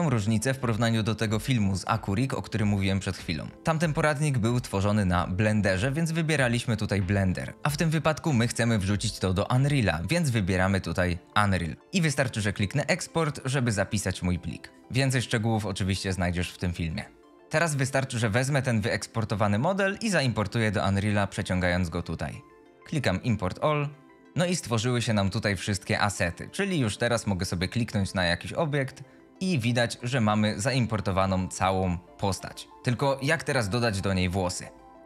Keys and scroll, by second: 17.3 F2, 30.2 d, 31.1 w, 31.8 a, 32.3 w.